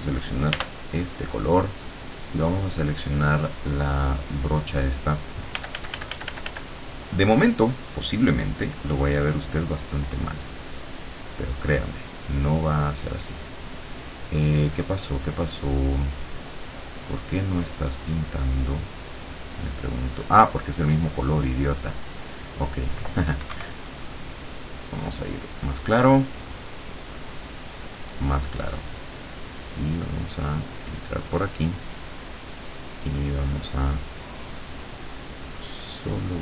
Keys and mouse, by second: 0.6 r, 2.6 click, 4.2 click, 5.6 f, 9.5-10.6 drag, 17.4 click, 18.7 click, 20.0 click, 22.0 click, 23.5 Escape, 24.0 click, 25.5 click, 26.5 click, 28.0 click, 29.6-32.4 drag, 32.9 click, 34.2-35.3 drag, 36.2-36.4 drag.